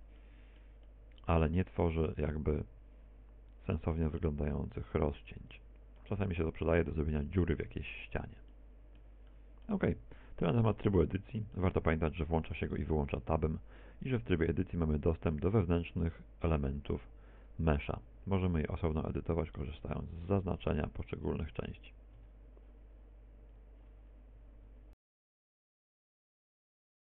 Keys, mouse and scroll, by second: 0.6 v, 1.9 click, 2.3 middle click, 2.9 middle click, 4.4 middle click, 4.6 click, 4.6 middle click, 9.7 Tab, 10.5 middle click, 11.3 middle click, 12.3 middle click, 13.1 middle click, 14.5 Tab, 14.9 Tab, 16.7 right click, 17.4 Tab, 18.5 right click, 18.9 right click, 19.5 right click, 19.8 right click, 21.1 click, 21.7 click, 22.1 click, 22.3 click, 22.8 click, 23.1 click, 23.5 click, 24.2 Tab.